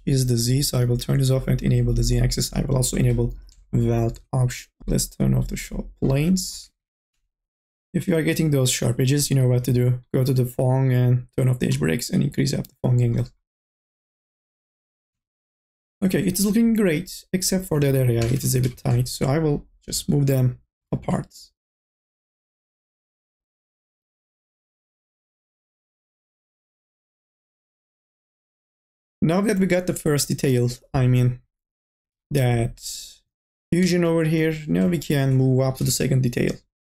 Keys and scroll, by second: 6.7 n, 7.0 a, 14.7 n, 15.1 b, 16.5 ctrl+z, 18.5 2, 18.9 e, 19.8 m, 20.3 o, 24.0 1, 31.7-33.0 typing, 35.6 3, 35.9 e.